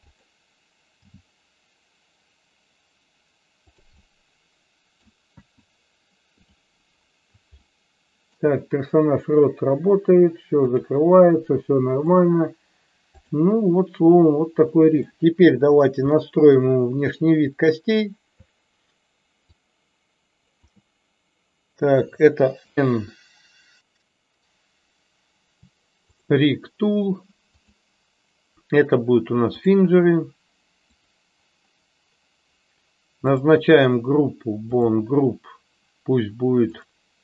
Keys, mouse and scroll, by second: 3.7 click, 3.9-5.0 middle drag, 7.5-8.3 shift+middle drag, 10.7 click, 12.0 click, 13.1 click, 15.1-15.5 shift+middle drag, 16.0-16.7 shift+middle drag, 17.7 click, 19.4-20.7 shift+drag, 27.5-29.8 drag, 31.0 click, 34.6 click, 36.9-37.2 drag.